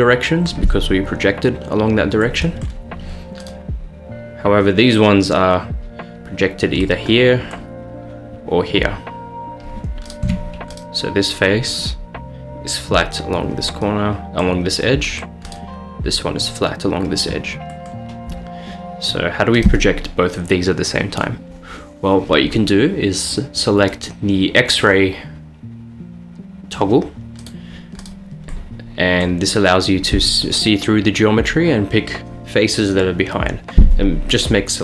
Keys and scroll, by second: 10.3 Tab.